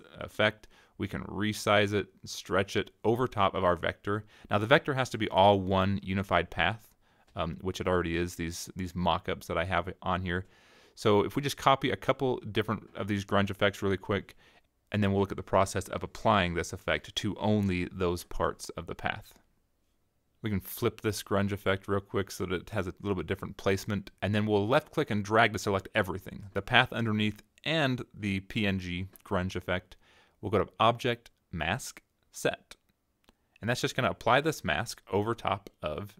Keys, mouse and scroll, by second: 0.9 click, 1.2 right click, 1.4 click, 1.7 click, 1.9 right click, 2.2 click, 2.8 click, 2.9 click, 3.3 click, 3.6 click, 4.0-4.4 drag, 4.6 click, 5.0-6.0 scroll down 10, 6.1 click, 6.4 right click, 6.9 click, 7.1 click, 7.2 right click, 7.6 click, 7.9 click, 8.1 click, 8.5 click, 8.6 click, 9.0 click, 9.3-9.8 drag, 10.1 click, 10.3-10.8 scroll down 3, 11.0-11.6 scroll up 4, 11.6 click, 12.0 click, 12.2 click, 12.5 right click, 12.8 click, 13.4 click, 13.7 click, 13.9 click, 14.8-15.3 drag, 15.4 click, 16.0-17.0 middle drag, 17.3 middle click, 18.3 middle click, 19.1 click, 21.9 click, 24.1-25.9 drag, 28.0 click, 33.2 click, 35.5-36.1 middle drag.